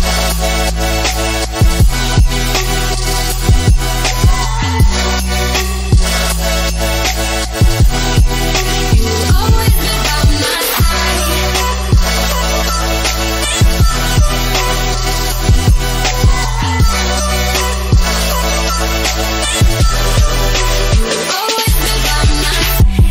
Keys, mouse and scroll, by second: 1.6 click, 3.6 click, 6.7 click, 9.9 Return, 10.4-11.0 typing, 12.6 scroll up 1, 14.0 click, 17.3 click, 22.3 click.